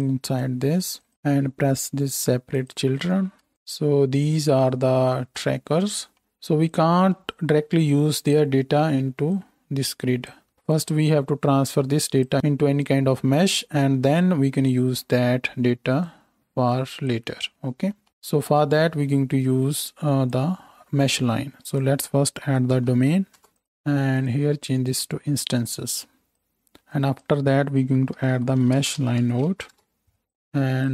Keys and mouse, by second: 0.3 middle click, 3.4-6.2 ctrl+shift+drag, 8.4 click, 9.3-23.6 middle drag, 23.6 click, 24.1-30.1 middle drag, 30.1-30.9 drag.